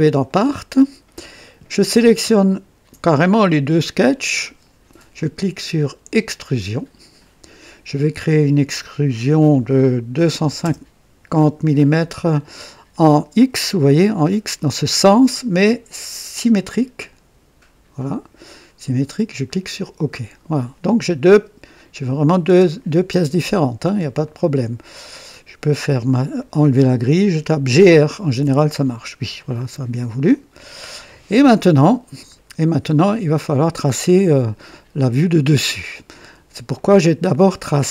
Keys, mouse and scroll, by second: 0.2 click, 2.4 ctrl+click, 6.7 click, 10.1 KP_2, 10.3 KP_5, 10.5 KP_0, 17.0 click, 19.4 click, 21.9 click, 22.4-23.1 typing, 24.2 click, 25.3 click, 26.3-27.1 drag, 27.9-28.8 typing, 29.3-30.1 drag, 30.2 click, 31.5-34.4 drag, 35.5-36.3 drag, 36.7 click, 37.4 right click.